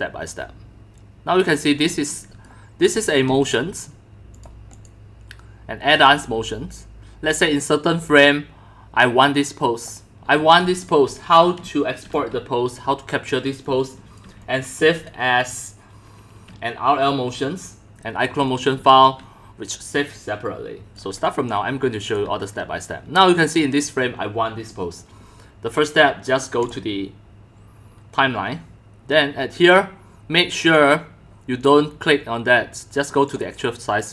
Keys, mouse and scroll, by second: 1.8 c, 2.9 x, 3.3 c, 3.5-4.0 drag, 4.4 click, 5.4-7.8 typing, 5.7 click, 7.3 click, 7.7 click, 10.3-12.1 typing, 10.6-12.1 drag, 13.5 click, 13.6 c, 14.4 x, 14.9 x, 15.1 click, 18.4 x, 18.7 c, 19.0-20.1 drag, 20.1-20.9 x, 21.0 click, 21.1-22.1 c, 26.7 click, 33.2 click.